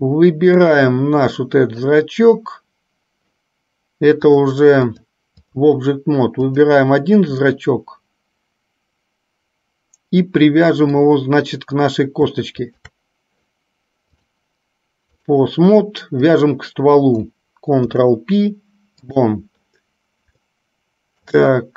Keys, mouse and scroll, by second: 1.7 click, 4.4 click, 4.9-5.9 drag, 6.7 click, 7.7-11.2 middle drag, 12.8 shift+click, 14.3-15.7 drag, 16.4 click, 17.9 ctrl+p, 20.6-21.6 middle drag.